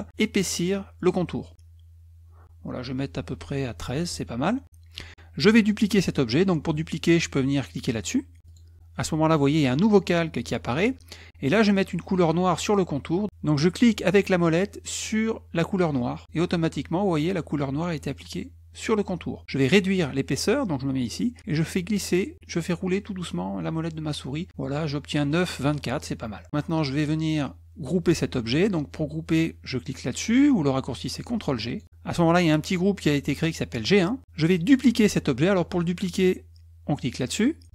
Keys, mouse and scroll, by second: 8.5 click, 26.7-27.0 drag.